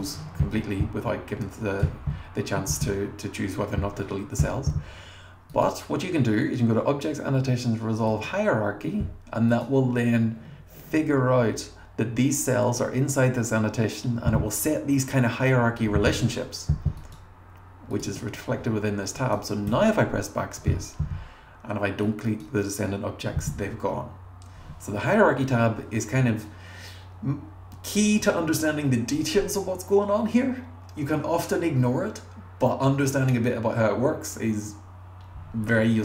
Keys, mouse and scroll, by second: 0.0-1.9 drag, 9.5 click, 17.0 click, 17.9 click, 19.2 click, 19.7 BackSpace, 22.0 click, 25.2-25.5 scroll up 1.